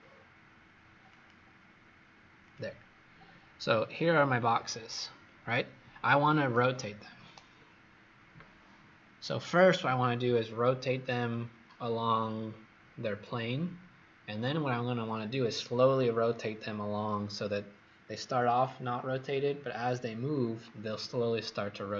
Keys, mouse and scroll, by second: 5.1 Escape.